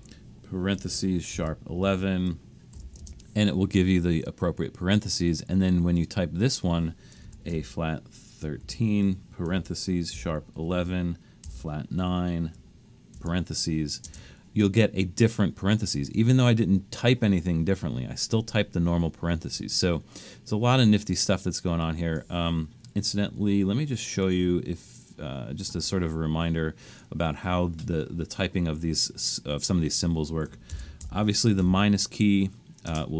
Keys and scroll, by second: 0.0-3.0 typing, 7.3-14.1 typing, 23.1 BackSpace, 24.3 BackSpace, 30.5-31.6 typing, 32.9 space.